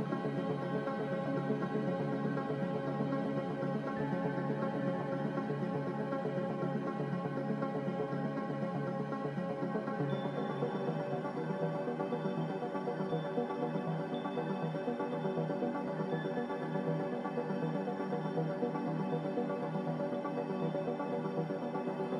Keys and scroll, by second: 1.6 b, 6.7 a, 9.5-10.5 typing, 21.5-22.1 typing.